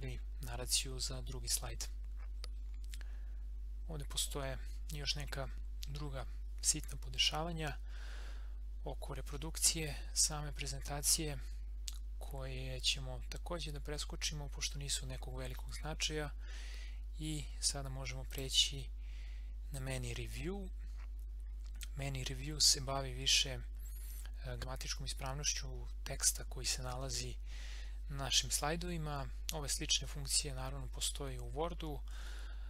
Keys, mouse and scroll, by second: 18.3 click.